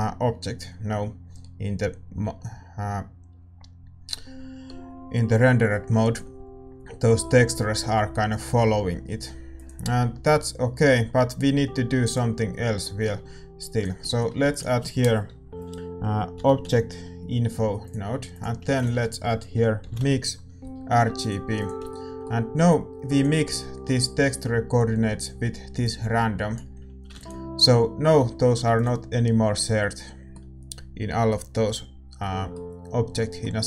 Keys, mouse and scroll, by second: 2.2-21.5 middle drag, 2.2 shift+z, 2.2 g, 21.5 shift+a, 21.9-27.2 middle drag, 27.2 ctrl+s, 27.2-31.9 drag, 31.9 ctrl+s, 31.9-33.6 middle drag.